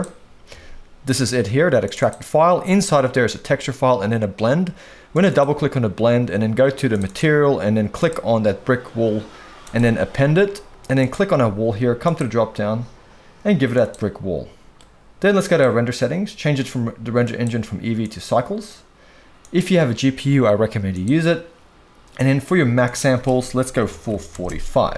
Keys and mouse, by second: 11.0 click, 12.4-13.9 drag, 15.4 click, 17.2-18.2 drag, 19.4-21.0 drag, 22.8-24.3 drag.